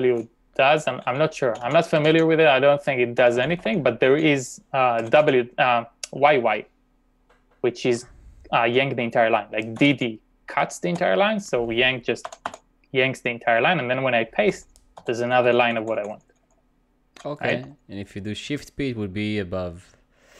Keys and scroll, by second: 0.0-3.9 typing, 5.0-5.7 typing, 9.8 typing, 11.0 u, 12.2 typing, 14.2-15.7 typing, 17.4-18.1 typing.